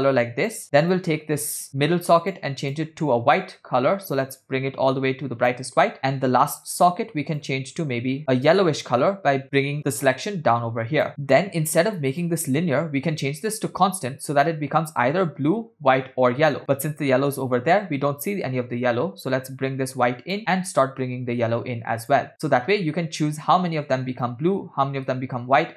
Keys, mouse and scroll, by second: 0.9 click, 2.3 click, 2.7 click, 6.0 click, 6.6 click, 7.4 click, 12.1-14.2 drag, 19.5-20.4 drag, 20.7-22.2 drag, 22.3-25.7 drag.